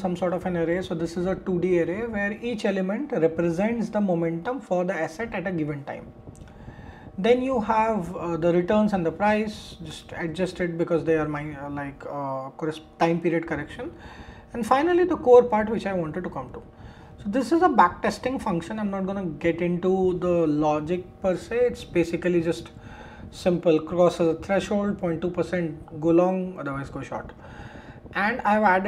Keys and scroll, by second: 9.9 shift+Return, 17.2 shift+Return.